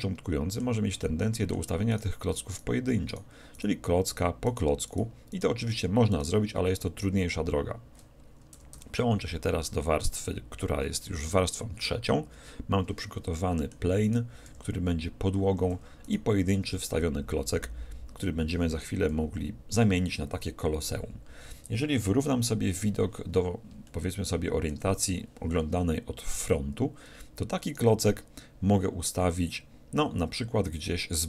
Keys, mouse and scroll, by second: 1.9-7.9 right drag, 8.1 right click, 8.5 2, 8.7 3, 9.7-11.6 middle drag, 13.4-15.2 middle drag, 14.1-15.8 right drag, 14.5 g, 16.1-17.8 right drag, 16.7 g, 17.9 right click, 19.7 KP_1, 23.9-25.8 middle drag, 27.7-29.4 right drag, 30.7-31.2 scroll down 1.